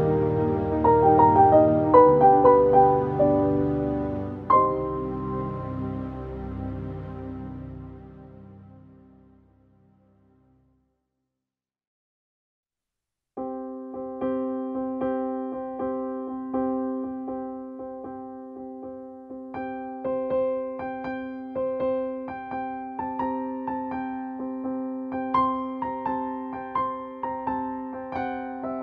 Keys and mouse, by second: 1.9 click, 9.5 right click, 10.6 click, 10.6 typing, 14.4 click, 14.4 typing, 16.8 click, 19.3 click, 19.4 click, 20.7-26.1 shift+drag, 22.7 typing, 26.1-28.8 shift+drag, 27.2 typing.